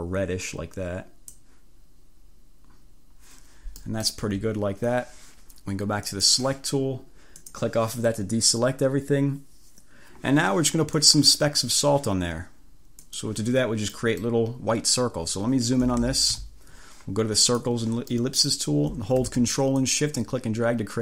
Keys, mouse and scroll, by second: 3.9 click, 4.3 1, 6.1 click, 7.5 click, 11.1 click, 13.1 click, 14.0 click, 15.9 =, 17.5 click, 18.2 click, 18.7-19.3 scroll up 2, 19.3-19.8 scroll up 1, 19.8-21.0 drag.